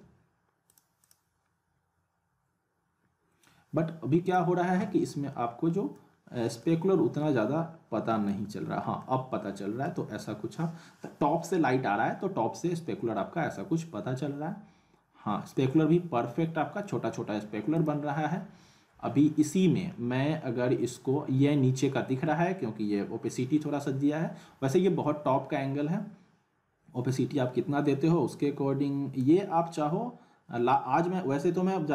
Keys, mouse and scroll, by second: 0.7 click, 1.5 scroll up 1, 4.3 click, 5.3-6.2 alt+middle drag, 6.6-8.5 alt+middle drag, 8.5-9.0 scroll up 1, 9.0-9.9 middle click, 10.1 shift+q, 17.7 click, 29.2-31.9 drag.